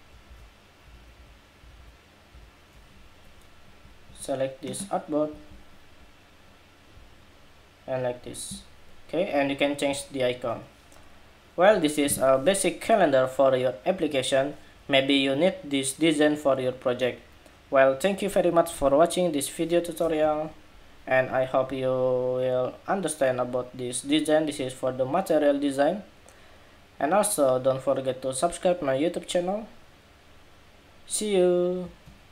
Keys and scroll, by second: 0.0 alt+shift+Down, 0.6 alt+Down, 0.9 alt+Down, 1.3 alt+Down, 2.1 alt+Down, 3.4 alt+Down, 20.0 super+=.